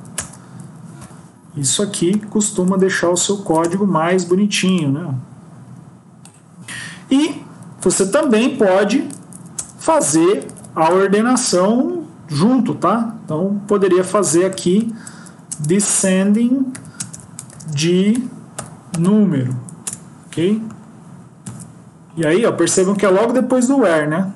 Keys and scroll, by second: 0.8 BackSpace, 1.4 End, 2.0 Delete, 2.9 ctrl+shift+Right, 3.1 ctrl+shift+Left, 3.5 BackSpace, 9.4 Up, 9.5 Return, 14.0 Left, 14.1 Left, 15.4 Return, 16.0 Right, 19.7 Return, 21.3 ctrl+s.